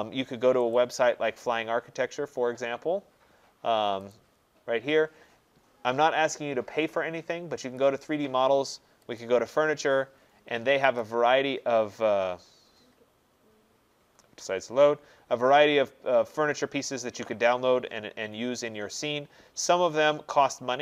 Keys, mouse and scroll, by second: 0.8 click, 4.1 click, 9.2 click, 11.0 click, 16.2-16.6 scroll, 17.6-19.2 scroll, 19.2-19.8 scroll.